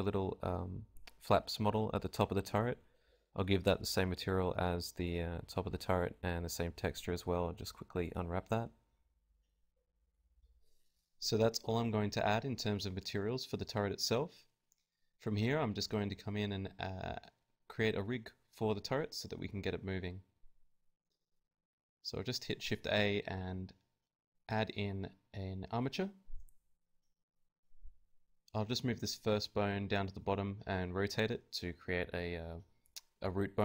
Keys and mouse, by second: 0.0 Escape, 1.0 right click, 1.4 KP_Decimal, 1.6 middle click, 1.7 g, 4.4 a, 4.4 z, 4.9 z, 4.9 u, 5.7 alt+z, 6.5 KP_Divide, 7.2 KP_Divide, 7.3 Tab, 7.8 a, 8.3 z, 9.1 z, 9.9 click, 10.4 a, 11.9-14.4 drag, 12.4-13.9 right drag, 14.8 z, 15.6-16.6 right drag, 16.1 shift+s, 22.1 right click, 22.8 shift+a, 25.3 KP_3, 25.8 KP_5, 27.0 Tab, 27.6-29.4 typing, 31.2-32.7 right drag, 31.4 g, 32.7 g.